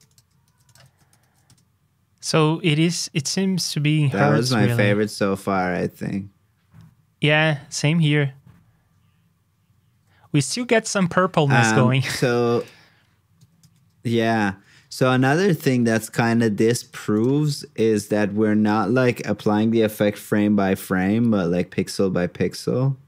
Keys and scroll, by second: 0.4 super+c, 1.2 super+v, 16.9 super+c, 17.3 super+v.